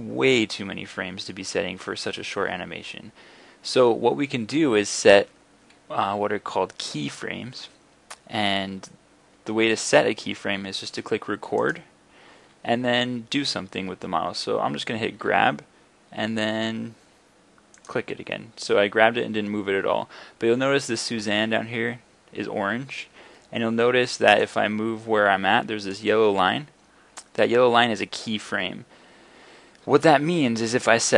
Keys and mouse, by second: 15.2 g, 24.5-24.9 drag.